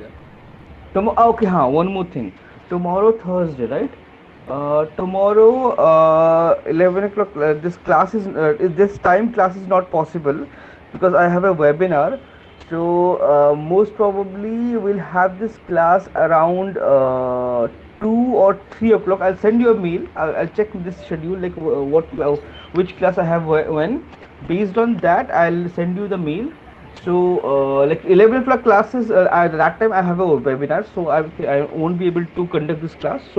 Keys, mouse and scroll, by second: 4.6 click.